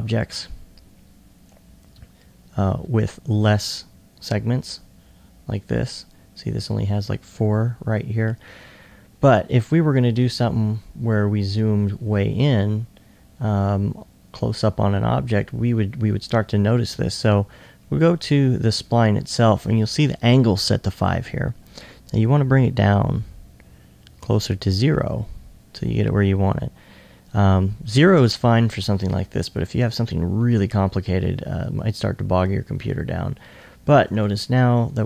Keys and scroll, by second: 10.1 1, 28.9 2, 29.5 2, 30.1 2, 31.6 2.